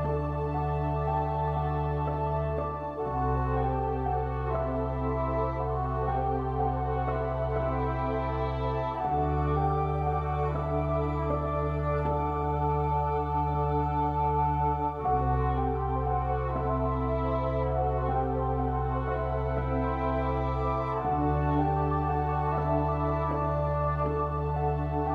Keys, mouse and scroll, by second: 1.5 a, 2.2 ctrl+r, 3.8 a, 11.5 click, 12.8 click, 13.9 ctrl+r, 18.5 ctrl+r, 19.1 ctrl+r, 20.9-23.0 drag, 22.1 ctrl+r, 22.8 ctrl+r.